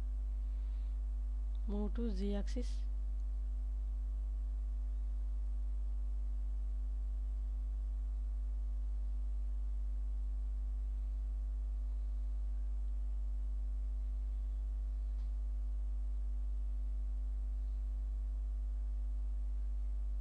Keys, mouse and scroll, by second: 0.2 a, 1.4 alt+z, 3.1 click, 3.5 click, 4.3 g, 4.7 z, 8.6 shift+click, 9.5 alt+z, 11.3 click, 12.4 click, 13.1 alt+z, 15.0 g, 15.2 z, 19.2 shift+click.